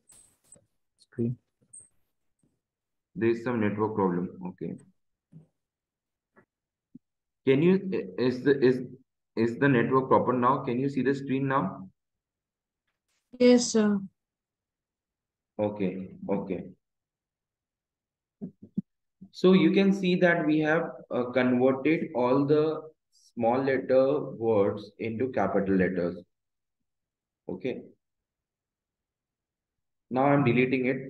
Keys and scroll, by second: 22.0 Up, 23.5 Left, 25.0 Up, 26.5 Right, 30.5 Delete.